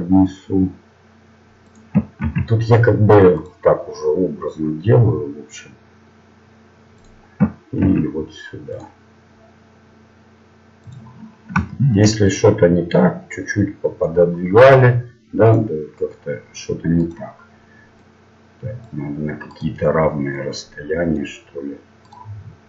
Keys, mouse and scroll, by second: 2.2 ctrl+r, 7.8 ctrl+r, 11.4 middle click, 12.2-14.0 right drag, 13.0-15.4 drag, 15.4-18.8 right drag, 18.0-22.6 drag, 19.5-22.6 right drag.